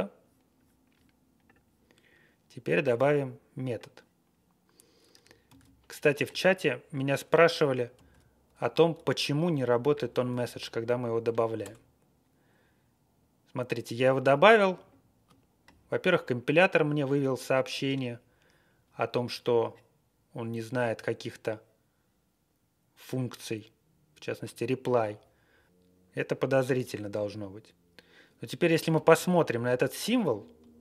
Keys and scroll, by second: 5.4 super+c, 7.9 super+v, 8.5 Up, 8.9 Tab, 9.4 Down, 9.8 Tab, 11.6 Return, 27.7 Page_Up, 27.9 Up, 27.9 Page_Up, 28.2 Page_Up, 28.2 Page_Up, 28.3 Page_Up, 28.3 Page_Up, 28.6 Page_Down, 28.9 alt+f, 29.6 alt+..